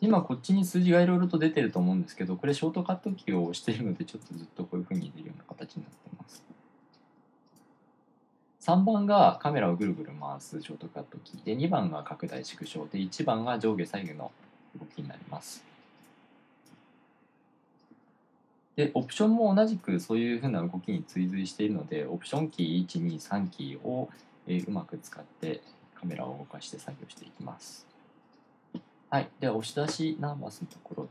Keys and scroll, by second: 0.0-0.3 typing, 2.1-3.5 typing, 5.1-9.1 typing, 11.5-15.0 typing, 16.5-17.1 typing, 24.5-27.5 typing.